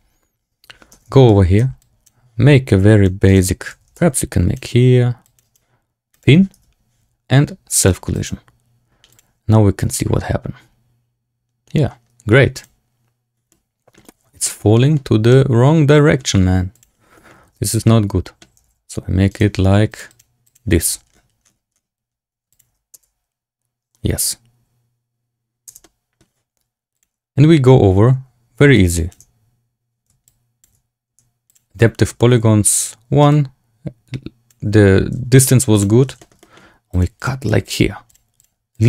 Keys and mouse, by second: 0.8 Tab, 1.2 a, 1.4 a, 1.5 c, 3.6 a, 3.8 a, 3.9 c, 6.5 Tab, 8.0 click, 13.4-13.9 middle drag, 14.4 shift+drag, 14.7 drag, 15.2-16.1 drag, 16.7 click, 17.4 Tab, 17.8 middle click, 18.5 g, 19.8 click, 20.2-20.6 drag, 20.7 g, 22.6 Tab, 22.8 space, 25.7-26.1 drag, 25.7 space, 28.6 shift+click, 30.2 shift+click, 31.4 click, 32.7 click, 33.3-34.4 shift+drag, 35.8 click, 36.1 shift+middle click, 36.3 middle click, 36.8 click, 37.1 click, 37.3 click, 37.6 click, 38.0 click, 38.3 click, 38.6 click.